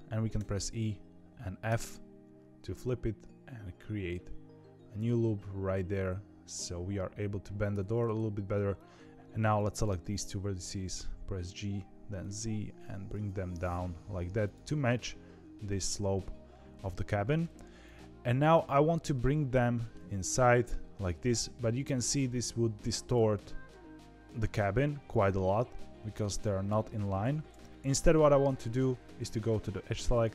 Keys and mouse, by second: 8.8 click, 9.6 click, 10.1 g, 12.9 click, 13.2 g, 17.9 click, 19.1 middle click, 20.0 g, 23.4 middle click, 23.9 middle click, 25.4 middle click, 27.2 ctrl+z, 27.7 middle click, 29.6 2.